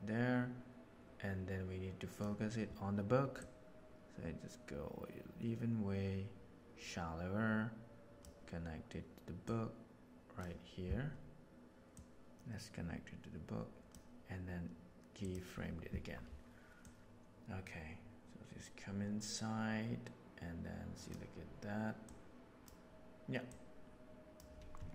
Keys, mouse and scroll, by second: 3.3 click, 8.2 click, 9.4-10.4 drag, 11.9-13.9 drag, 15.2 click, 16.8-21.1 drag, 22.0-22.6 drag, 23.4-24.4 drag.